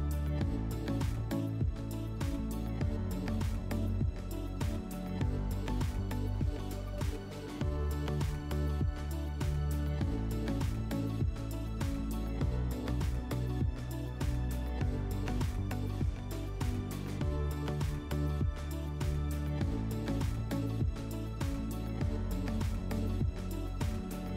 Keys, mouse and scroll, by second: 5.2 click, 7.4 click, 7.6 click, 8.3 1, 8.7 Return, 9.9 click, 12.6 click, 15.8 click, 16.0 click, 16.8-17.7 typing, 19.1-19.8 typing.